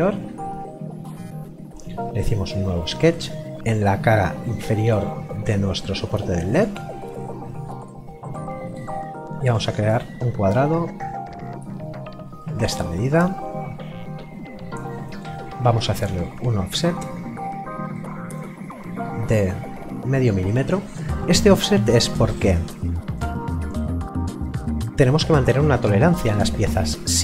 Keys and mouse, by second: 2.4 click, 3.5 middle click, 6.5 click, 9.8 click, 16.0 o, 18.0 click.